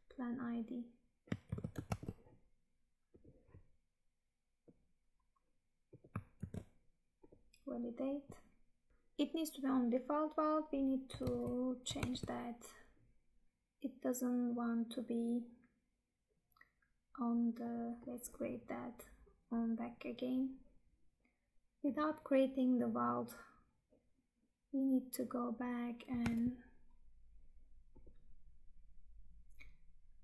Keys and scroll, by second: 1.4 ctrl+c, 1.9 Tab, 6.3 ctrl+v, 11.3 Tab, 26.4 Tab.